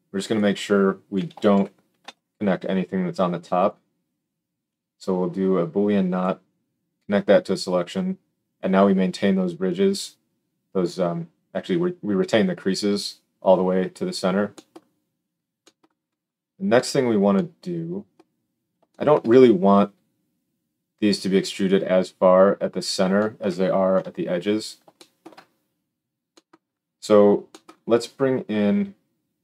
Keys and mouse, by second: 3.6-4.7 middle drag, 4.7-29.4 drag, 23.9 KP_7.